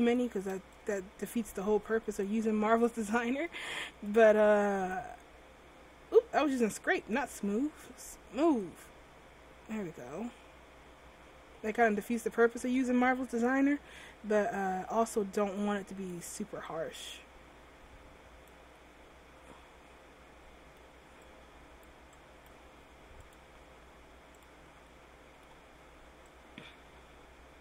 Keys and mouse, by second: 0.5 ctrl+z, 2.7-5.0 drag, 8.8-13.0 drag, 13.1-15.7 middle drag, 15.7-18.6 drag, 18.9 middle click, 25.0-27.6 drag.